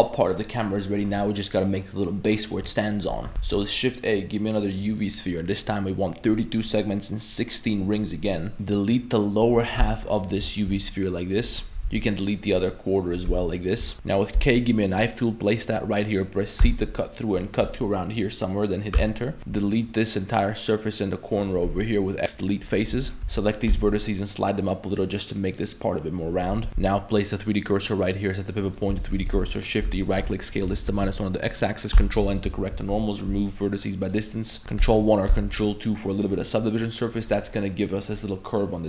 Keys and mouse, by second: 0.6 middle click, 3.3 shift+a, 3.4 shift+a, 8.5 z, 8.5 a, 8.5 b, 9.8 x, 10.6 shift+middle drag, 11.8 b, 13.3 x, 13.9 shift+middle click, 13.9 a, 14.3 k, 19.4 3, 19.4 a, 19.4 c, 21.6 x, 22.9-23.7 typing, 26.5 Tab, 26.7 Tab, 26.7 1, 26.7 shift+s, 28.2-28.8 drag, 28.9 a, 29.1 a, 29.3 shift+d, 29.8 s, 31.9 ctrl+n, 32.2 z, 32.5 a, 32.7 a, 33.3 m, 34.5 middle click, 34.6 ctrl+Tab, 34.8 ctrl+1, 35.3 ctrl+2, 35.5-36.0 middle drag, 36.5-36.9 middle drag, 37.4 middle click.